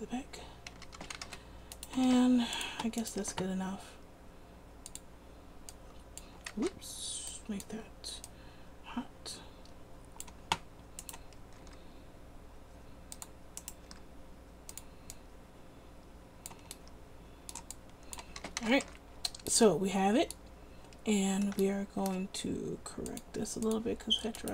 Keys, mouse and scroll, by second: 0.9 a, 1.2 a, 1.4 alt+r, 2.2 r, 3.4 r, 6.8 ctrl+z, 11.7 r, 14.0 r, 18.5 a, 18.7 a, 19.0 alt+r.